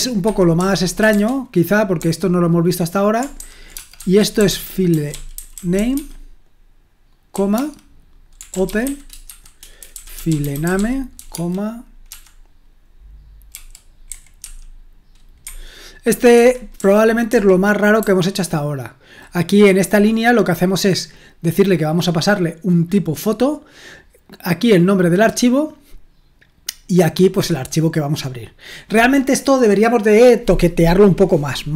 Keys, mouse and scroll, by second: 0.0-1.9 typing, 3.1-11.7 typing, 13.5-16.8 typing, 18.0-19.2 typing, 20.2-20.9 scroll up 1, 20.9-22.4 scroll down 1.